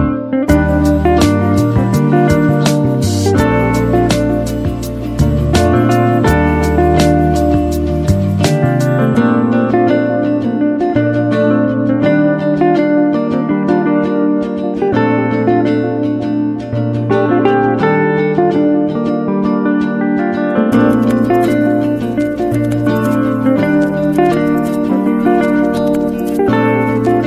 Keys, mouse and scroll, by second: 3.8-8.6 drag, 17.6 alt+Num_Lock, 17.6 click, 18.5 alt+click, 22.8-24.9 drag, 22.9-23.6 typing.